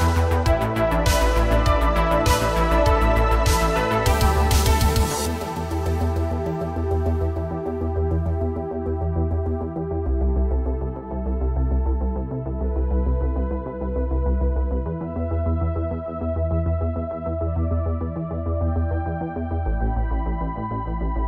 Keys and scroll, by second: 7.8 space, 11.5 r, 11.9 z, 12.0 z, 15.3 i, 17.5 ctrl+c, 19.0 ctrl+v, 21.0 ctrl+shift+v.